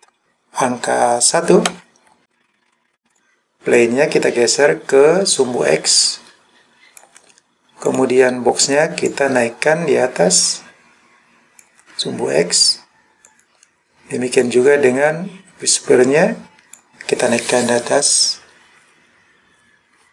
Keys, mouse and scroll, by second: 1.8 KP_1, 3.1 click, 3.8 click, 7.9 click, 9.1 click, 13.3 click, 14.4 click, 15.0 click.